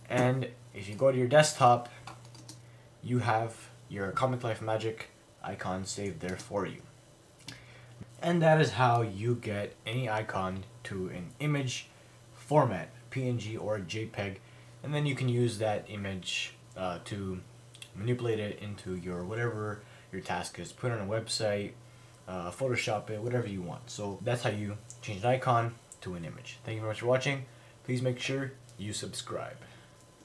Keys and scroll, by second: 0.2 F19, 2.5 F19, 7.5 F19.